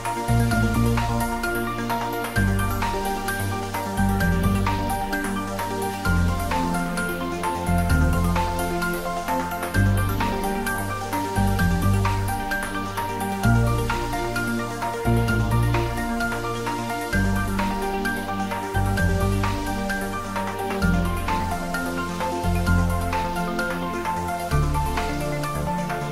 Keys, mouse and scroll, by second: 0.4-1.6 middle drag, 1.6 alt+e, 2.0 click, 3.5 shift+middle click, 3.9 ctrl+z, 5.2 alt+e, 5.6 click, 7.4 click, 7.5 Tab, 7.8-9.7 middle drag, 9.7 ctrl+s, 10.0 ctrl+middle click, 10.7 middle click, 12.0 right click, 12.3 click, 13.3 middle click, 14.7 click, 15.2 ctrl+middle click, 15.5 ctrl+s, 15.8 ctrl+middle click, 16.5 middle click, 19.1 ctrl+s, 20.4 alt+h, 21.3 click, 22.9 click, 23.5 s, 24.6 click, 25.1-26.1 typing.